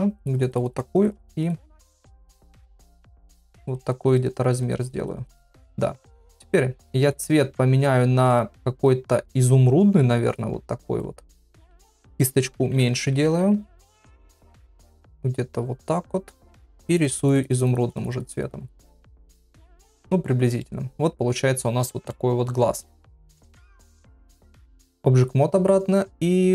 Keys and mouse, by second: 0.2 click, 2.5 click, 3.0 click, 3.9 click, 4.6 click, 7.0 click, 12.6-13.4 [, 14.8 ], 15.0 ], 15.1 ], 16.5 click, 18.2 click, 18.8 click, 20.6 middle click, 21.8 shift+middle click, 24.2 ctrl+Tab.